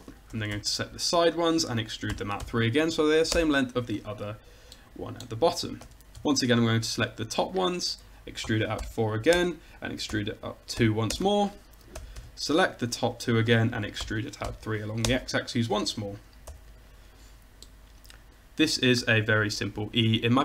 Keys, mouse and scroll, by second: 0.4 a, 0.6 c, 1.5-3.4 drag, 2.2 e, 5.9 a, 6.2 c, 8.5 e, 10.2 e, 12.0 a, 12.2 c, 14.1 e, 16.6 a, 16.8 middle click, 17.4 middle click, 18.3 Tab.